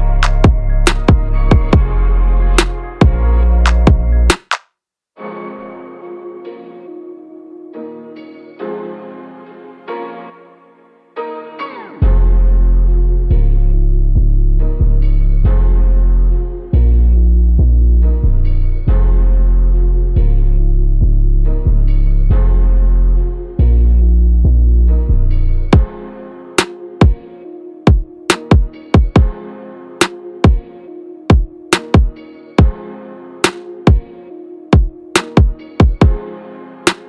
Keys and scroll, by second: 32.8 Up, 33.0 Up, 33.2 Up, 33.5 Up, 33.7 Up, 33.9 Up, 34.1 Up, 36.3 Up, 36.5 Left.